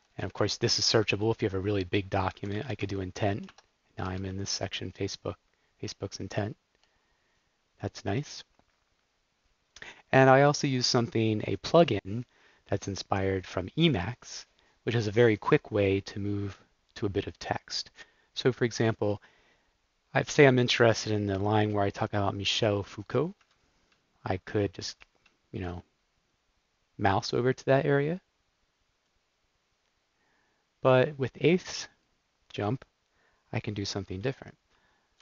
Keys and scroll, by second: 0.2 Up, 2.0-3.1 typing, 3.4 Return, 3.9 Down, 4.2 Down, 5.8-6.8 typing, 23.6 Right, 24.8 shift+Right, 25.0 shift+Right.